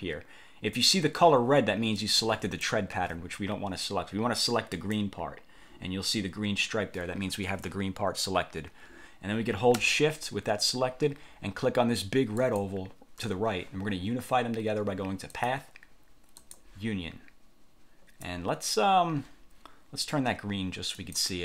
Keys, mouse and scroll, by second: 2.1-2.9 drag, 3.1 ctrl+z, 4.9 click, 12.5 shift+click, 15.5 click, 16.5 click, 21.1 click.